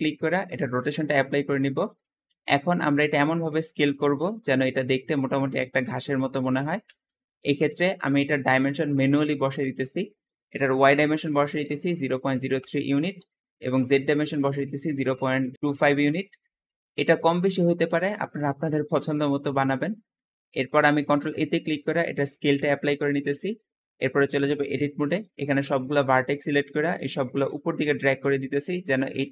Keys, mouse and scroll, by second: 1.4-2.0 scroll up 2, 2.0-2.7 middle drag, 2.7 s, 4.1 drag, 4.2-7.3 typing, 5.5 click, 6.5 click, 7.3 click, 7.7 middle click, 7.7-8.1 scroll up 4, 8.1-9.6 middle drag, 9.6-12.6 shift+drag, 10.7 KP_0, 10.9 KP_Decimal, 11.2 KP_0, 12.2 KP_3, 12.5 Return, 13.7-16.5 drag, 14.6-16.1 typing, 17.1-17.7 middle drag, 17.7-18.1 scroll up 2, 18.1-19.5 middle drag, 19.5-19.9 scroll up 2, 19.9-20.9 shift+middle drag, 20.9 ctrl+a, 22.8 click, 24.7 Tab, 25.0-26.9 middle drag, 26.9 click.